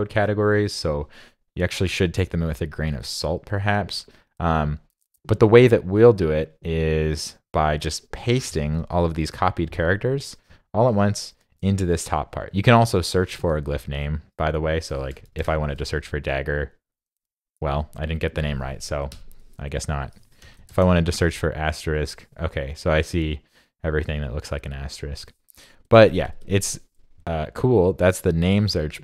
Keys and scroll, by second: 18.9 super+a.